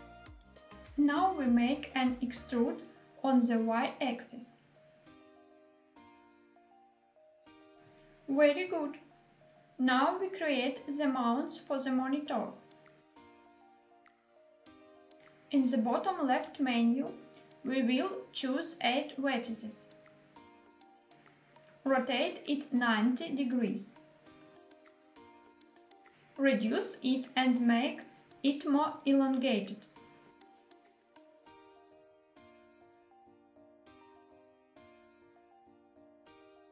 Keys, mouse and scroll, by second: 0.7 shift+middle click, 0.8 e, 1.6 y, 6.0 click, 6.4 scroll down 2, 6.8-7.2 middle drag, 8.3 Tab, 8.8-9.2 scroll down 1, 9.2 middle click, 10.8 click, 10.9 shift+a, 15.4 click, 16.7-18.4 drag, 19.9 click, 21.0 scroll up 1, 21.5 r, 24.3 y, 24.8 9, 25.1 0, 25.7 click, 26.4 s, 28.5 click, 29.5 g, 29.9 z, 32.5 click, 33.3-33.8 scroll up 3, 33.8 s, 34.2 x.